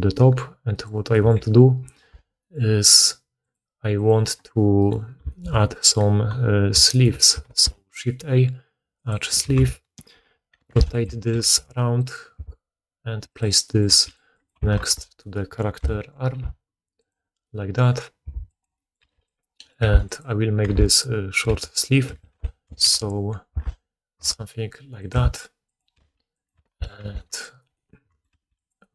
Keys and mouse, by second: 0.7 right click, 1.9 2, 3.4 click, 3.9 click, 4.0 middle click, 4.7 right click, 4.8-20.8 middle drag, 7.4 shift+a, 9.4 r, 11.3 g, 12.3 s, 13.8 g, 14.7 shift+1, 15.7 KP_1, 16.3 r, 18.2 s, 18.9 g, 19.7 r, 20.6 Tab, 20.8 right click, 21.0-28.9 middle drag, 21.4 b, 22.0 g, 25.1 s, 25.9 g, 26.9 Tab, 27.5 right click, 28.2 g.